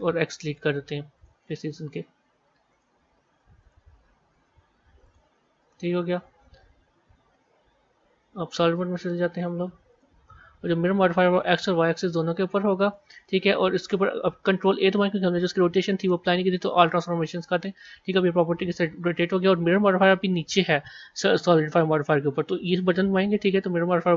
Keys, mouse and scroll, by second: 2.6 click, 6.1 Tab, 7.1 z, 7.9 z, 11.2 click, 11.8-14.6 middle drag, 14.6 ctrl+a, 23.3-24.1 drag.